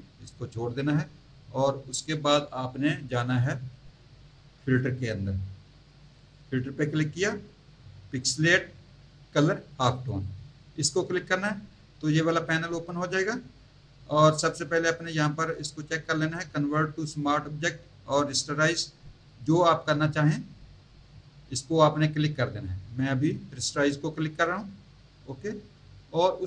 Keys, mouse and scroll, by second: 6.2 click, 10.0 click, 24.4 click.